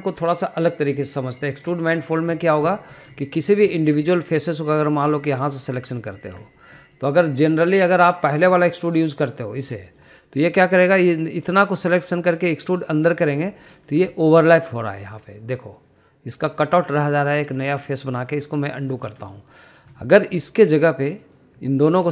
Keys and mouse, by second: 3.0 middle click, 3.3 shift+middle click, 3.6 click, 4.1 shift+middle click, 4.7 shift+middle click, 5.0 middle click, 5.7 click, 6.6 shift+click, 7.0 middle click, 7.4 shift+middle click, 7.8 middle click, 9.2-11.0 drag, 11.3 middle click, 12.8 click, 14.5 middle click, 15.1 shift+middle click, 15.4 middle drag, 17.5 middle drag, 19.9 ctrl+z, 20.5 middle click, 21.0 shift+middle click, 21.3 click.